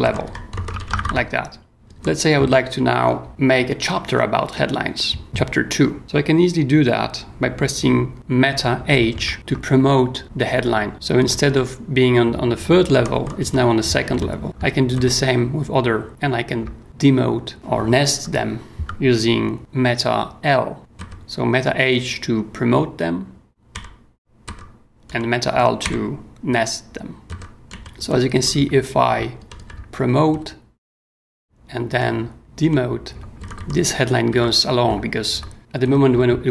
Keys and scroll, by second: 0.0-1.9 typing, 2.9 j, 9.3 super+h, 10.9 j, 11.2 k, 12.9 j, 13.4 h, 14.1 l, 14.4 k, 14.9 super+h, 16.1 super+l, 20.8 super+l, 20.9 super+h, 23.7 super+l, 24.4 super+h, 25.1 super+l, 27.3 super+h, 27.6-28.5 typing, 28.5 super+j, 29.4 super+k, 29.7 super+k, 30.3 super+h, 32.6 super+l, 33.4 super+j, 34.3 w, 34.9 super+w, 35.8 super+h.